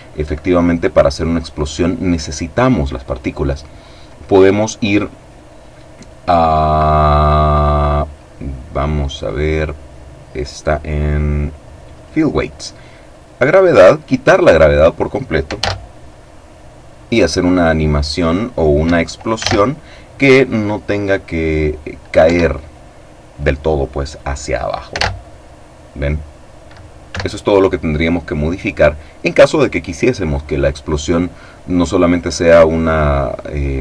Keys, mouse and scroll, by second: 3.0-4.9 scroll down 1, 8.8 click, 11.4 click, 12.6-13.6 drag, 15.1 alt+a, 18.3 Escape, 21.7 Escape, 24.5 alt+a, 26.6 Escape.